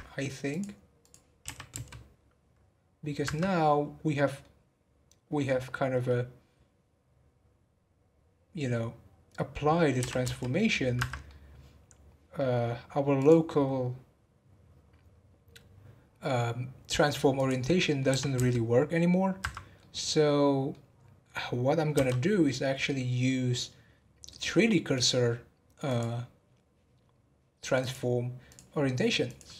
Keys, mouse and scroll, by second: 0.5 click, 1.4 r, 3.5-4.7 middle drag, 4.7-5.4 scroll down 1, 5.4-8.4 middle drag, 11.2-13.1 middle drag, 13.1 click, 17.7 middle click, 18.1 r, 19.7-21.9 middle drag, 21.9 n, 22.4-23.9 middle drag, 23.9 scroll up 2, 24.9-28.5 drag, 29.2 click.